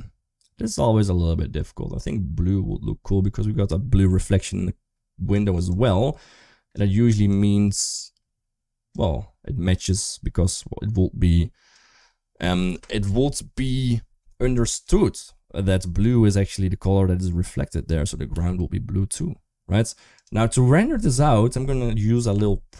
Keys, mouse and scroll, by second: 14.6 click.